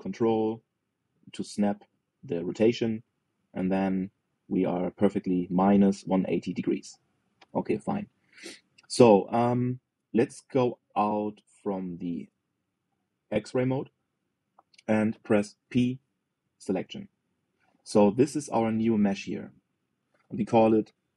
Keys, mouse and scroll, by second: 9.4-12.0 middle drag, 12.4-14.3 middle drag, 14.3 alt+z, 16.3 p, 19.1 click, 20.4 click, 20.5-21.1 drag.